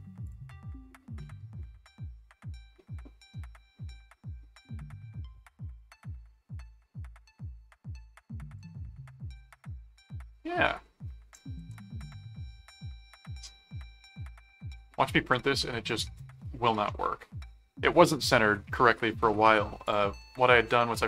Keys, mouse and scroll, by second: 0.2 click, 1.2-8.6 drag, 8.9 middle click, 9.7-10.8 middle drag, 11.3 ctrl+click, 11.6 ctrl+s, 13.0-14.0 middle drag, 19.8 click, 20.2 middle click.